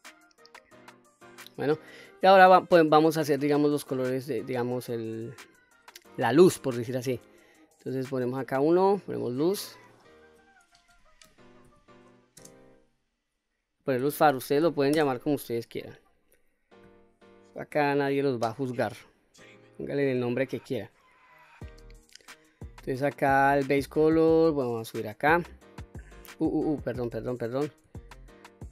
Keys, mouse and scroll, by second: 1.9 middle click, 8.4 click, 9.4 click, 10.0-16.1 drag, 18.1 click, 19.7 shift+click, 20.9-21.8 scroll down 2, 21.8-23.2 scroll up 2, 23.3 click, 27.1 ctrl+z, 27.9 ctrl+z.